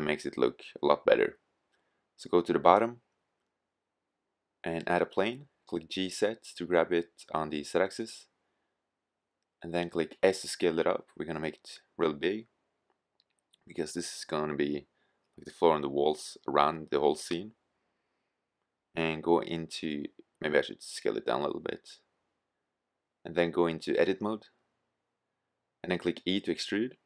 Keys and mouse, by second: 1.3 middle click, 5.6 g, 7.5-10.7 drag, 10.7 s, 14.7-16.0 drag, 16.0-19.8 middle drag, 19.8 s, 22.1-22.4 drag, 25.9 e.